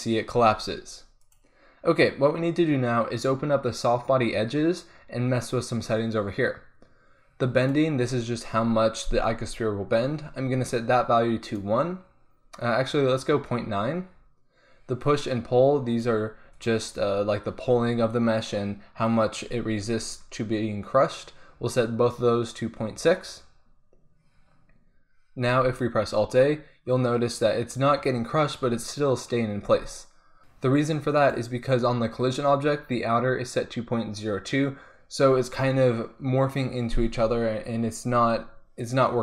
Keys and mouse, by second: 0.4 alt+a, 1.2-3.0 drag, 3.1-5.5 drag, 7.5-15.0 drag, 15.9-18.4 drag, 25.5 alt+a, 29.7 alt+a, 30.4-39.2 drag.